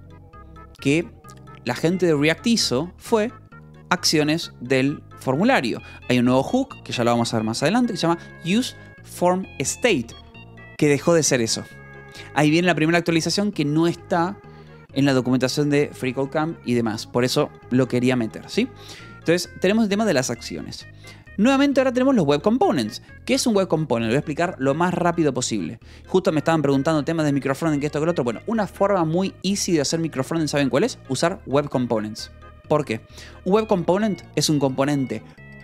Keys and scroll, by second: 19.6 j, 21.4 k, 21.7 j, 22.9 Escape.